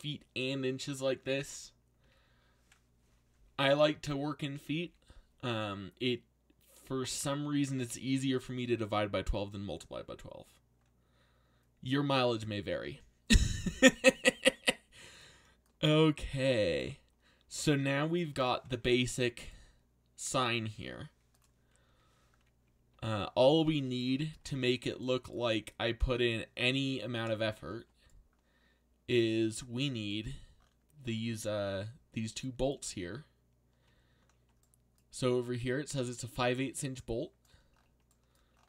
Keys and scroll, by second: 2.0 a, 4.0 z, 4.8 z, 19.0 z, 22.9 z.